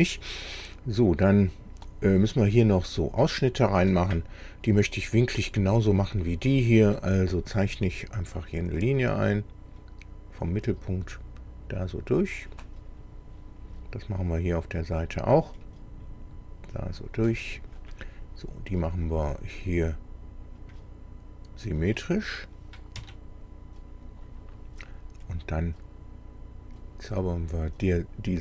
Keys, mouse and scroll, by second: 7.0 click, 10.4 click, 12.9 click, 14.9 click, 17.3 click, 17.8 click, 19.1 click, 20.6 click, 21.9 click, 23.0 s, 25.8-27.6 drag.